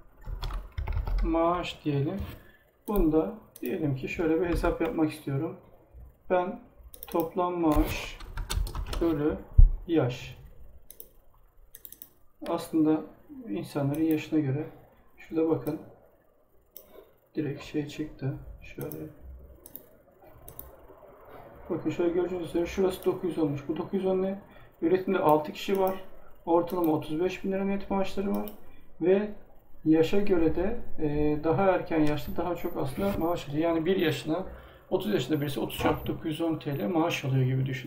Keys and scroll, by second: 0.0-1.0 typing, 4.4 BackSpace, 8.2 space, 8.7 shift+7.